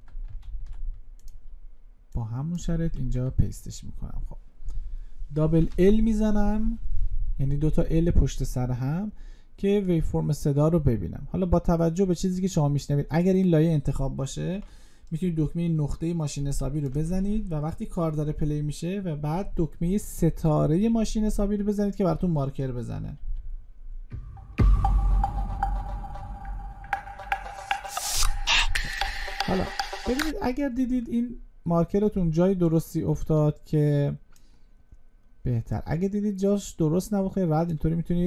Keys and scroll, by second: 0.2 ctrl+c, 2.6 ctrl+v.